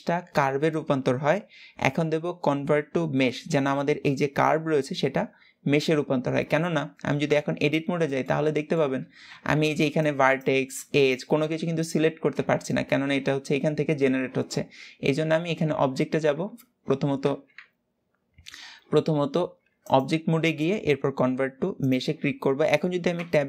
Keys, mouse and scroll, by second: 7.0 Tab, 7.4-7.8 scroll up 1, 7.8-8.8 shift+middle drag, 8.8-12.3 scroll up 2, 18.2 Tab, 19.5-22.7 drag, 22.9 Tab.